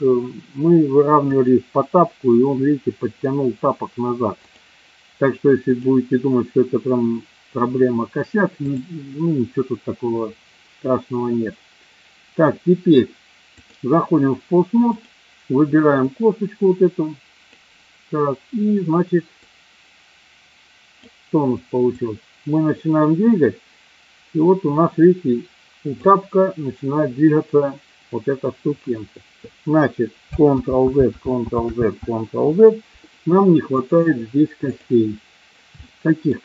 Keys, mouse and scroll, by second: 1.4 click, 4.4 click, 5.8 click, 8.7-13.7 drag, 14.9 click, 16.0-17.5 drag, 19.4-21.1 drag, 22.0-25.9 drag, 30.5 ctrl+z, 31.0 ctrl+z, 31.7 ctrl+z, 33.7-34.8 drag, 35.8 shift+middle click.